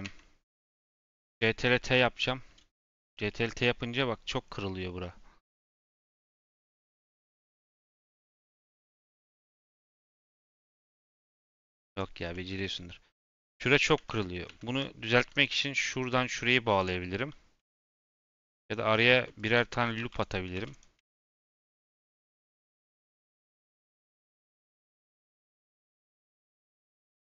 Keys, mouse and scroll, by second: 0.0 Tab, 0.4 Tab, 0.9 a, 1.3 ctrl+t, 1.8 Tab, 3.2-11.7 middle drag, 11.7-12.4 drag, 12.4-13.1 middle drag, 13.1-14.0 scroll up 1, 14.0 ctrl+z, 14.4 ctrl+z, 15.1 1, 15.4 click, 17.1 j, 17.9 ctrl+z, 18.2 ctrl+r, 19.1-22.2 ctrl+r, 22.8 ctrl+r, 24.4 ctrl+r, 25.3 ctrl+r.